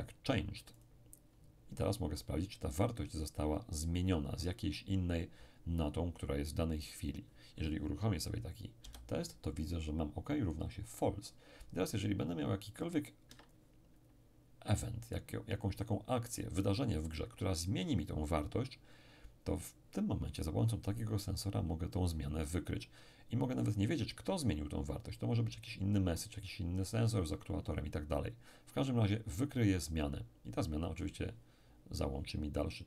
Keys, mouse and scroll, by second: 0.8 click, 8.8 p, 13.3 Escape.